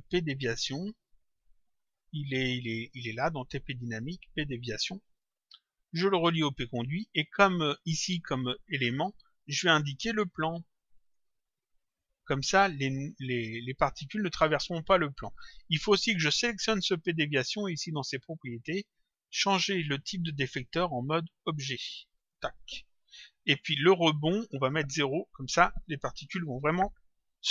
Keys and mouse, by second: 2.7 click, 4.2 click, 6.5 click, 9.3 click, 12.0 click, 16.3 click, 17.7 click, 20.6 click, 22.2 click, 24.6 click, 26.6 click.